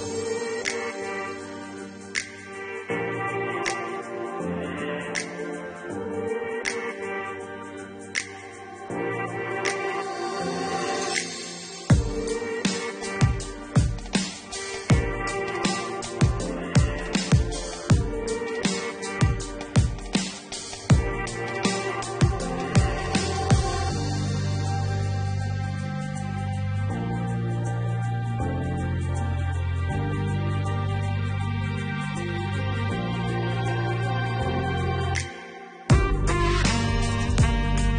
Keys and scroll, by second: 9.3 5, 9.5 0, 10.5 Return, 13.4 3, 14.6 -, 31.6 1, 31.8 0, 33.1 Tab, 33.6 1, 33.9 0, 35.2 Tab, 35.6 1, 35.8 0.